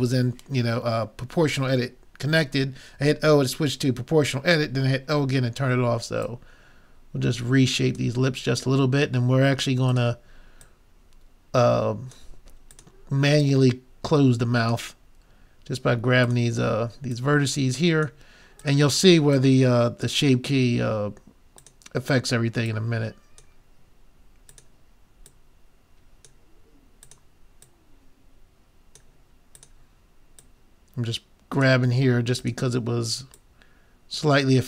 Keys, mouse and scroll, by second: 6.3-7.9 drag, 8.7-9.9 middle drag, 9.9-12.5 drag, 12.7-15.1 drag, 16.3-21.3 drag, 22.1-24.4 drag, 24.5-32.1 drag, 32.2 click, 32.4-34.6 drag.